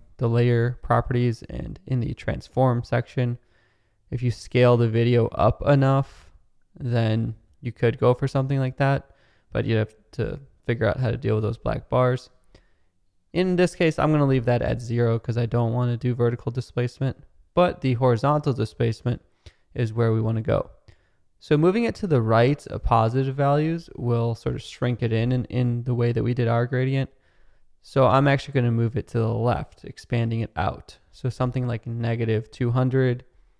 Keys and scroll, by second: 10.0 super+z, 14.0 0, 15.7 Return, 29.4 -, 30.9-31.8 typing.